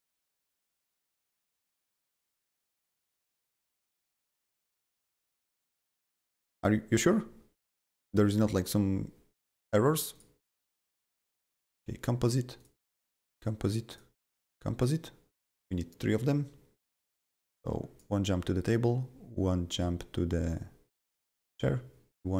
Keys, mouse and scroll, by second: 1.4 click, 10.1 click, 11.3 click, 12.6 click, 13.3 click, 13.9 click, 14.4 click, 17.0-22.3 drag.